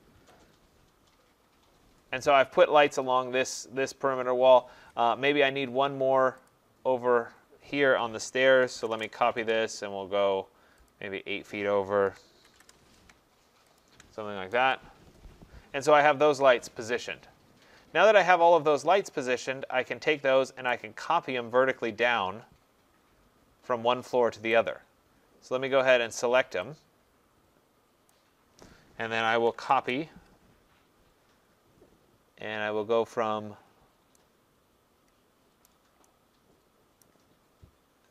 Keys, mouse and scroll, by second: 0.2 Escape, 6.5 click, 8.3-9.2 typing, 10.9 click, 11.8-12.6 typing, 13.8 shift+click, 14.4 Escape, 14.6 Escape, 15.5 middle click, 15.7 middle click, 18.1 middle click, 18.2 middle click, 18.3 middle click, 18.4 middle click, 18.5 middle click, 20.7 right click, 24.5 right click, 25.9 click, 28.1 click, 29.0-31.5 typing, 35.6 right click, 37.0 right click, 37.4 middle click, 37.5 middle click.